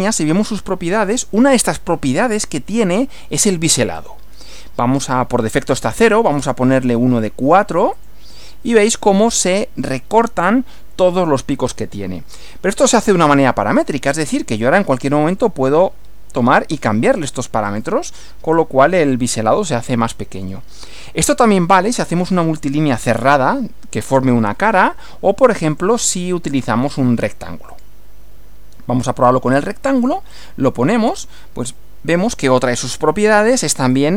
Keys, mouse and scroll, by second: 4.0 click, 6.0 click, 6.4-7.3 scroll up 4, 8.0 click, 14.3 click, 15.3 click, 16.0 scroll down 2, 17.7 click, 25.7 click, 27.7 click, 30.3 click, 31.7 click, 33.9 click.